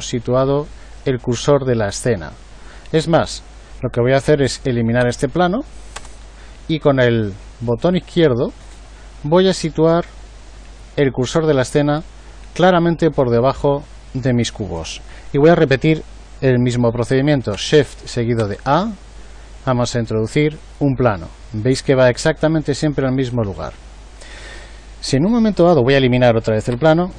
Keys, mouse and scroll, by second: 5.0 Delete, 18.4 shift+a, 26.7 Delete.